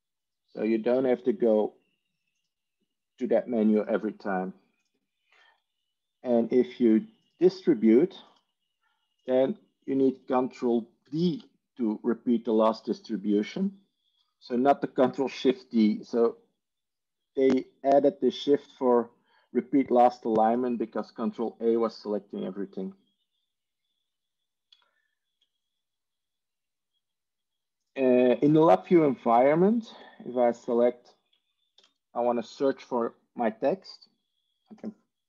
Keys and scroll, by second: 12.3 ctrl+d, 29.8 Tab, 31.8 ctrl+f.